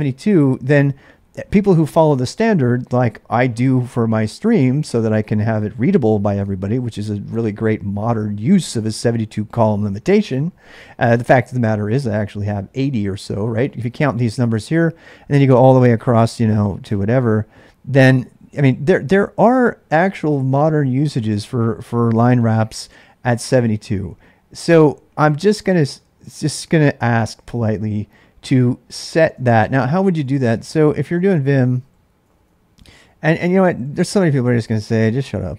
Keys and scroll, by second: 0.0-0.5 typing, 29.3-34.1 typing, 34.2 Tab, 34.8 Return.